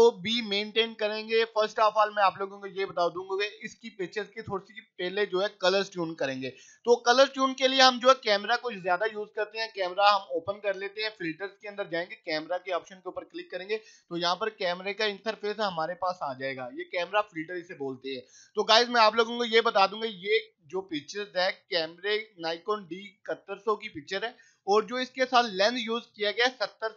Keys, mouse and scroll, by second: 2.3 click, 8.2 click, 15.8 click, 17.1 right click, 17.8 click.